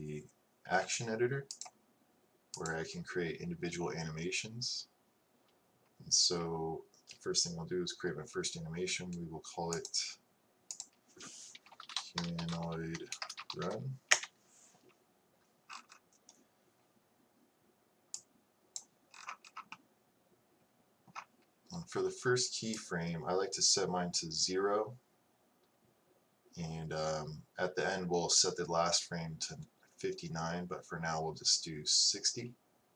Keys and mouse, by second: 0.1-1.7 drag, 11.5-15.0 drag, 17.7 middle click, 18.3-22.1 drag.